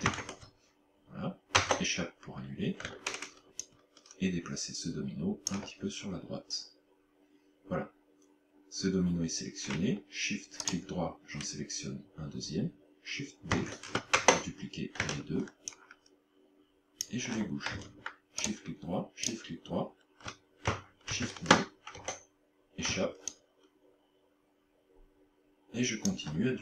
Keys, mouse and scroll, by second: 0.1 shift+d, 3.7 ctrl+click, 10.7 shift+right click, 13.5 shift+d, 15.7 ctrl+click, 18.5 shift+right click, 19.3 shift+right click, 21.1 shift+d, 23.3 ctrl+click.